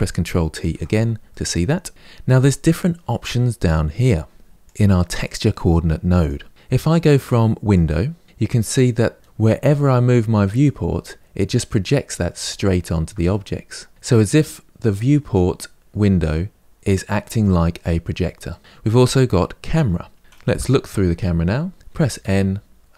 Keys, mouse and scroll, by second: 1.1 ctrl+t, 4.5 click, 8.2 click, 13.1-17.8 middle drag, 17.8-18.3 scroll down 1, 18.3-19.5 middle drag, 19.5 drag, 20.3 KP_0, 21.3 middle click, 21.7 n.